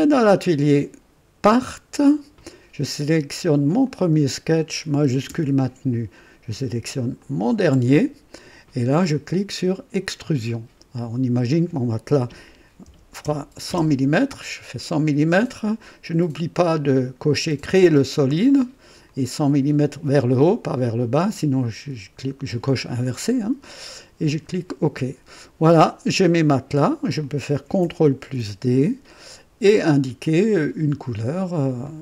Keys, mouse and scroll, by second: 1.5 click, 3.8 click, 7.2 shift+click, 9.9 click, 12.8 KP_1, 13.2 KP_0, 15.8-17.3 drag, 19.0-19.9 drag, 19.8 typing, 24.2 click, 27.2 click, 28.2 ctrl+d, 30.3 click, 31.8 click.